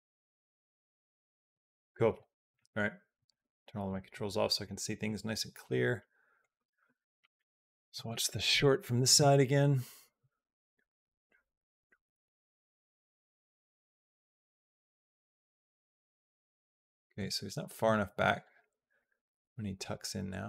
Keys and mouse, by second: 1.4 space, 3.0 click, 3.6 click, 6.2 click, 6.4 space, 17.1 space, 18.8-20.4 drag.